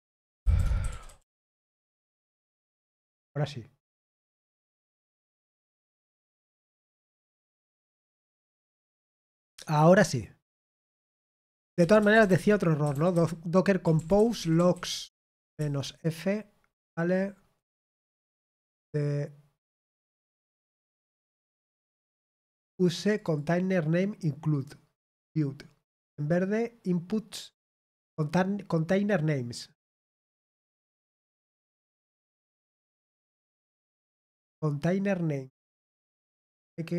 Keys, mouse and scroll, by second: 0.6-2.5 typing, 12.5-13.6 typing, 14.7-16.0 typing, 23.1 click.